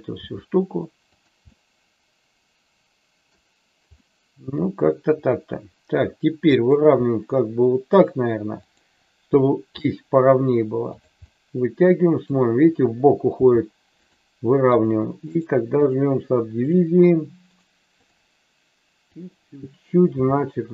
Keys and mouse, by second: 0.2 g, 1.0 click, 1.6-3.3 middle drag, 3.9-6.7 middle drag, 7.3 middle click, 8.7 click, 9.7 e, 10.8 click, 11.3 middle click, 13.3 g, 13.9 click, 16.6 click, 19.2 click, 20.2 g.